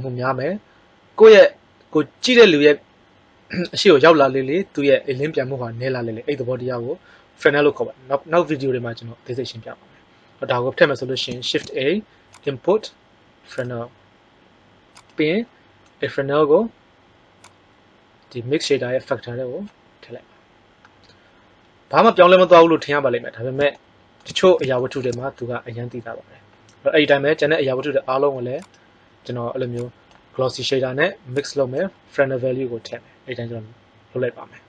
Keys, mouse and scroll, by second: 11.3 shift+a, 31.5 click.